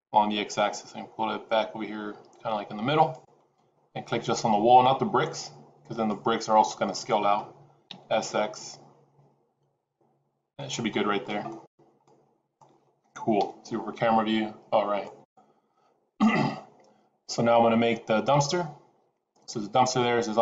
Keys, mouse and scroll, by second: 5.9 click, 7.8 s, 10.8 middle click, 11.6 scroll down 3, 11.9 middle click, 13.3 KP_0, 14.5-14.9 scroll down 1, 14.9 click, 15.6 middle click.